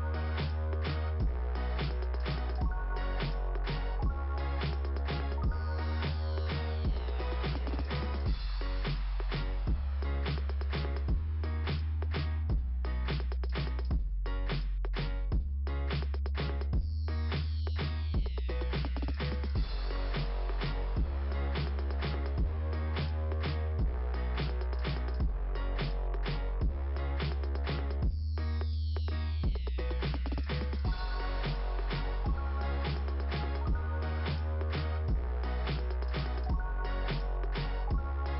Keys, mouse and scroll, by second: 0.1 click, 1.0 click, 2.7 click, 4.7 click, 12.2-12.6 scroll down 3, 14.5 scroll up 2, 15.0 right click, 16.4 middle click, 19.9-20.4 scroll up 2, 21.0-22.3 scroll up 3, 23.9 click, 31.5 scroll down 2, 33.2 scroll down 2, 33.9 scroll down 1, 36.8 click, 38.0 click.